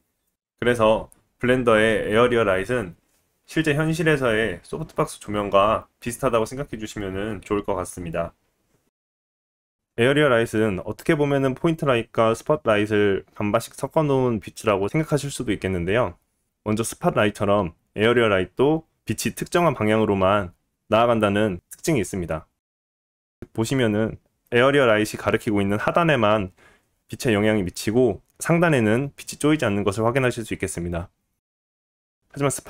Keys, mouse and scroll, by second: 0.0-23.2 middle drag, 0.0 shift+a, 2.7 shift+a, 5.0 g, 8.5 g, 23.4-32.6 drag.